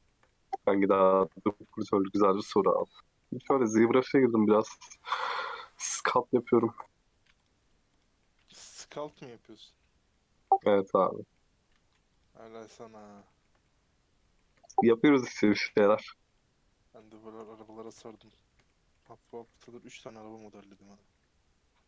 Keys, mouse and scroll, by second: 0.3-1.2 scroll down 3, 1.2 KP_Decimal, 1.9 scroll up 5, 2.2 shift+middle click, 3.1 scroll up 2, 3.2 middle click, 3.9-4.4 scroll up 8, 4.4 middle click, 4.8-5.1 scroll down 10, 5.2 shift+middle click, 6.1-7.4 scroll up 4, 7.4 click, 7.6 right click, 8.2-9.2 middle drag, 9.2-9.6 scroll up 3, 9.6 middle click, 10.1 scroll down 5, 10.4-12.2 middle drag, 12.2 right click, 13.0 scroll down 5, 13.2-14.8 shift+middle drag, 14.8 scroll up 3, 15.4 click, 16.0 click, 17.7 right click, 18.0 shift+middle click, 18.2-18.6 scroll up 4, 18.6 shift+middle click, 19.4 click, 19.8 g.